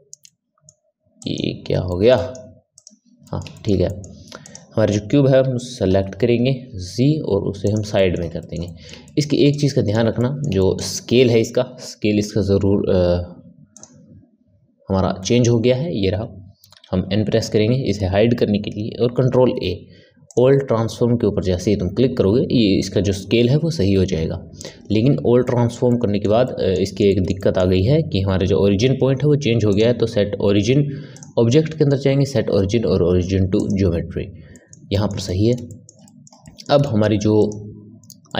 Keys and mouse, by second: 0.2 middle click, 1.1 click, 1.8 middle click, 2.1 right click, 2.7 click, 3.2-4.4 middle drag, 4.4 click, 5.3 KP_7, 6.5 g, 7.9-12.1 middle drag, 12.1 n, 13.7 click, 16.5 n, 19.1 ctrl+a, 23.4 n, 24.8 n, 25.4-29.6 middle drag, 29.6-34.2 drag, 34.5-37.3 ctrl+middle drag, 37.3 click, 38.2-38.3 middle drag.